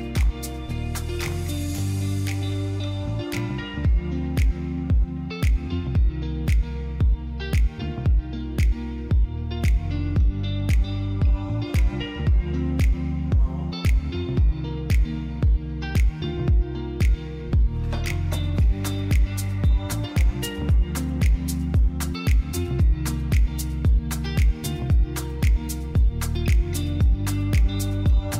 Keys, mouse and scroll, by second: 0.6 click, 1.2 r, 1.5 x, 2.0 click, 2.5 s, 3.7 click, 6.2 click, 7.8 KP_7, 9.4 r, 9.8 z, 13.0 click, 14.0 shift+d, 14.4 r, 14.7 z, 16.1 click, 16.6-17.7 typing, 19.0-20.3 middle drag, 20.3 click, 20.7 middle click, 21.3 click, 23.7 click, 24.0 middle click, 24.9 click, 26.6 click, 27.0 middle click.